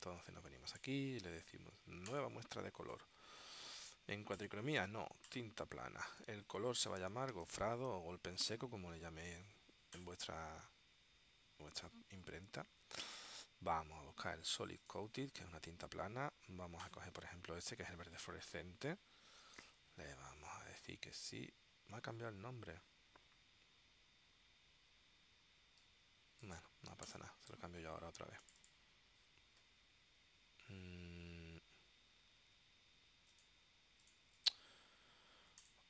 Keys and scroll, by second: 6.7-8.5 typing.